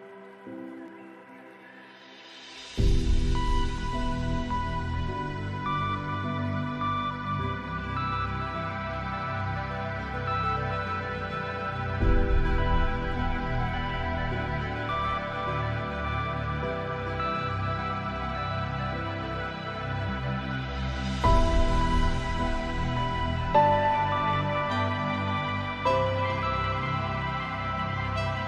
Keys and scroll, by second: 12.1 F10.